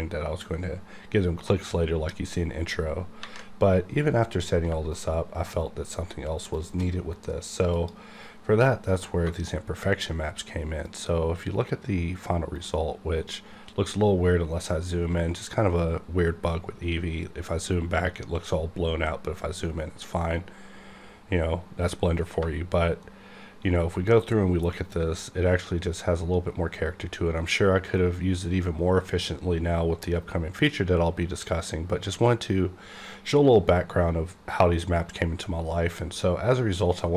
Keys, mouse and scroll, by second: 4.9 shift+right click, 7.7 click, 9.5 shift+right click, 13.3-14.9 scroll up 1, 16.7-18.5 scroll down 1, 19.0-20.3 scroll up 1, 20.8-21.4 scroll up 1, 21.4-22.3 scroll up 1, 23.0-30.0 shift+right drag.